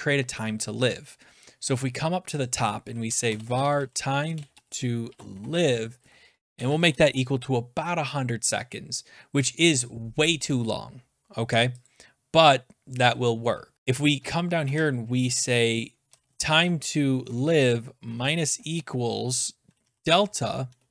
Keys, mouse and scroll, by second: 2.5 click, 2.8-7.4 typing, 8.6-9.3 typing, 11.8 click, 13.0 click, 14.1 Return, 14.4-20.9 typing, 14.6-15.8 drag, 17.2 Tab, 20.8 Return.